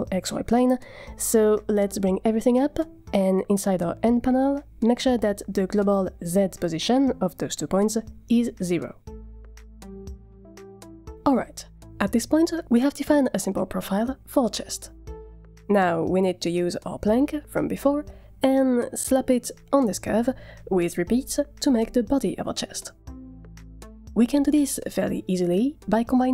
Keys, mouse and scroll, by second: 0.6 a, 1.5 g, 3.9 scroll up 3, 4.0 n, 4.8 click, 6.1 click, 7.1 click, 10.1 n, 10.8 scroll down 4, 11.4 a, 11.5 a, 12.5-13.4 middle drag, 13.8 scroll down 4, 14.6 shift+middle click, 15.0 scroll up 1, 15.4 shift+middle click, 20.3 click, 26.0 click.